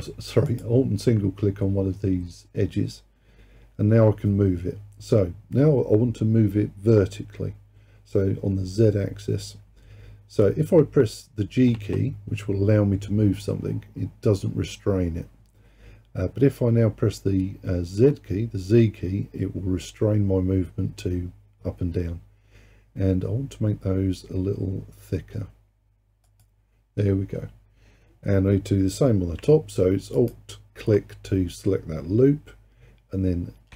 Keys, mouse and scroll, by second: 0.5 alt+click, 11.8 g, 30.2 alt+click.